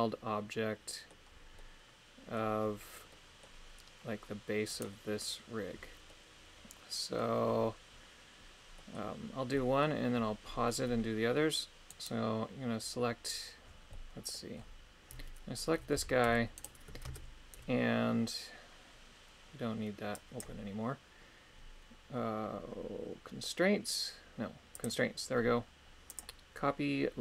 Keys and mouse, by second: 1.6 middle click, 3.2 middle click, 4.9 right click, 6.0-7.2 middle drag, 8.7 middle click, 9.5 middle click, 12.0 right click, 13.9 middle click, 20.4 click, 26.0-27.2 drag.